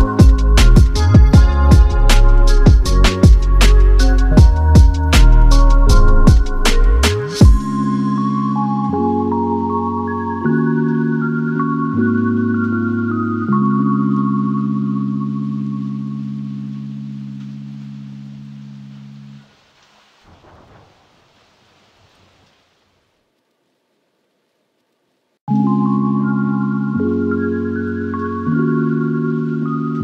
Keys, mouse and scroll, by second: 0.5 shift+click, 0.8 typing, 2.2 typing, 2.3 Return, 2.7 scroll down 6, 3.4 middle click, 4.1-5.2 scroll up 14, 4.4 middle click, 5.2 typing, 6.7-7.4 typing, 7.4 middle click, 7.7 middle click, 8.5 typing, 8.6-9.7 scroll up 5, 12.0-13.3 typing, 12.9 Return, 13.5 double click, 13.8 right click, 15.5 typing, 17.2 right click, 19.4 middle click, 19.8-20.5 scroll down 5, 24.1 space, 24.2 scroll down 1, 24.4 middle click, 24.8 scroll up 5, 25.2 middle click, 25.8 scroll up 3, 26.0-26.3 scroll down 3, 26.3 middle click, 26.7 double click, 27.8 typing, 29.5 middle click, 29.6-30.0 typing.